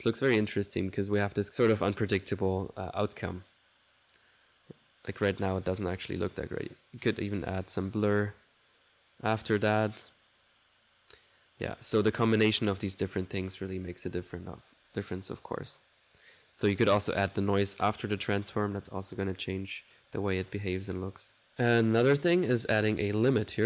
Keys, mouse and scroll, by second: 4.7 click, 5.5-6.5 middle drag, 6.6 click, 7.5 click, 8.6-10.7 drag, 11.7 click, 13.7 click, 14.2 1, 22.7 right click, 23.0 click, 23.2-23.6 typing.